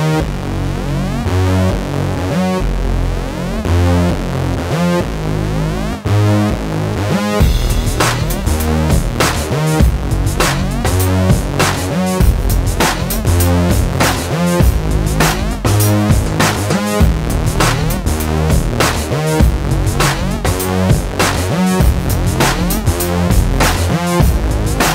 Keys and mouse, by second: 0.5 alt+s, 1.5 ctrl+KP_Subtract, 1.7 alt+s, 3.0 ctrl+KP_Add, 3.3 alt+s, 3.9 a, 4.9 Tab, 6.2 middle click, 7.0 j, 7.7 middle click, 8.3 j, 8.8 j, 10.2 middle click, 11.2-14.0 typing, 14.2 middle click, 15.3 ctrl+s, 18.4 a, 18.9 shift+s, 20.3 middle click, 21.2 alt+s, 22.9 ctrl+shift+b, 24.4 ctrl+KP_Subtract, 24.6 alt+s.